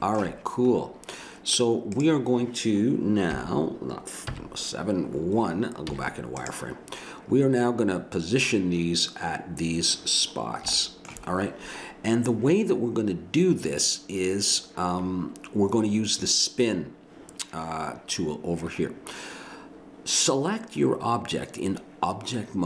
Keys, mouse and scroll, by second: 1.9-3.3 drag, 3.3 KP_7, 4.3 KP_1, 5.8 z, 10.9 middle click, 12.1-15.0 middle drag.